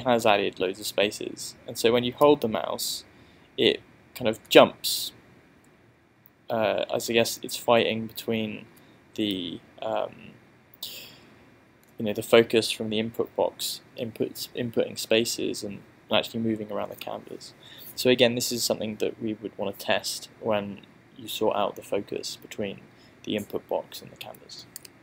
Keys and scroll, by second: 2.3 space, 5.7 space, 9.3 space.